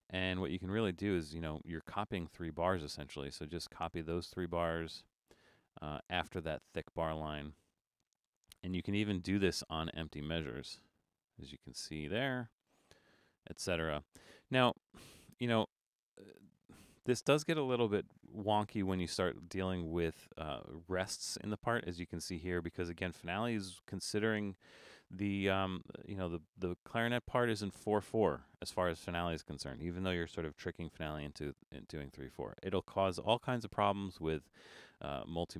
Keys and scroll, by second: 31.4 super+-.